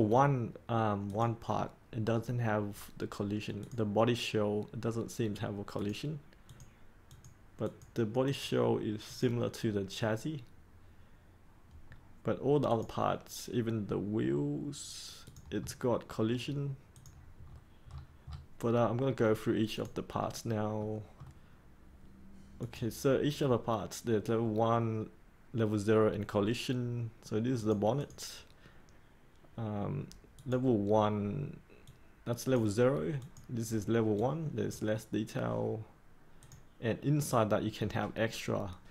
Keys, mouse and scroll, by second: 15.5-16.9 scroll up 1, 16.9 click, 17.4 scroll up 1, 19.7 click, 20.1-20.7 scroll up 1, 20.7 middle click, 22.6-38.9 drag.